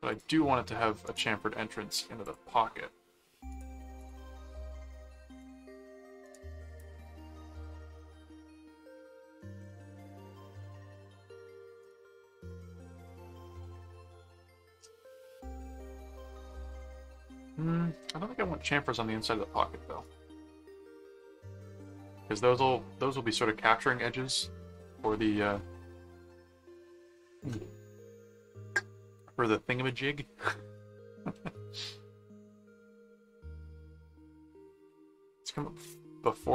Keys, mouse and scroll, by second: 0.1 click, 1.0 right click, 2.3 click, 3.5 right click, 4.0 click, 5.4 click, 6.2 right click, 6.9-9.1 middle drag, 9.4-11.1 middle drag, 11.8 right click, 12.4 click, 13.8 click, 15.0 middle click, 16.7 click, 17.4 click, 18.1 middle click, 20.0 click, 20.7 right click, 21.5 middle click, 28.4-30.2 middle drag, 30.6 middle click, 31.3-34.4 middle drag, 35.5 click.